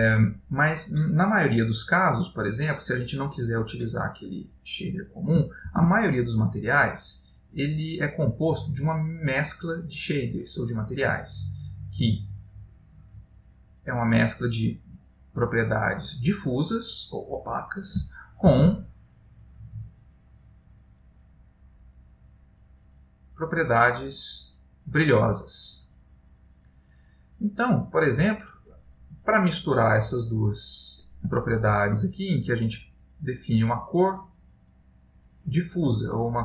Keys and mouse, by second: 20.8 shift+a, 27.6 click, 31.4 ctrl+middle click, 32.3 middle click, 33.1 click, 35.7 click.